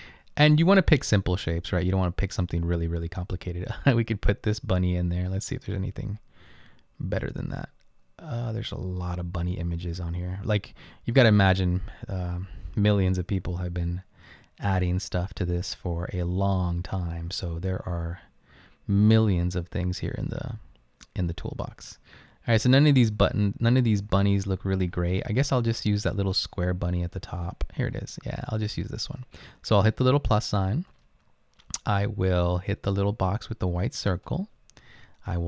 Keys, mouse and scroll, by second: 1.0 typing.